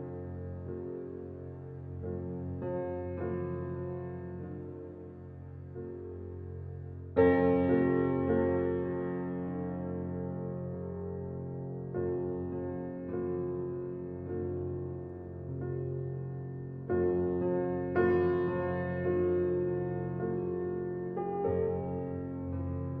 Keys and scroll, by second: 13.8 ctrl+g.